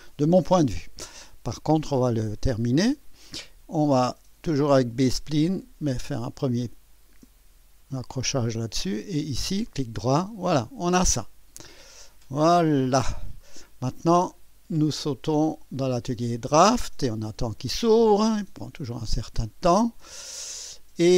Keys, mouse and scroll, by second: 2.9 click, 6.2 click, 8.9 click, 9.7 right click, 12.2 click, 13.4 right click, 15.4 click, 16.7 click, 20.5 scroll up 2.